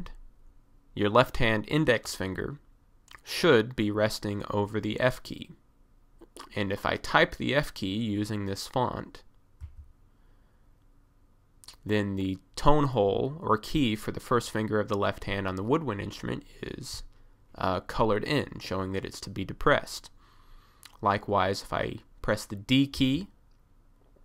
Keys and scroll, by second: 9.7 f, 23.0 d.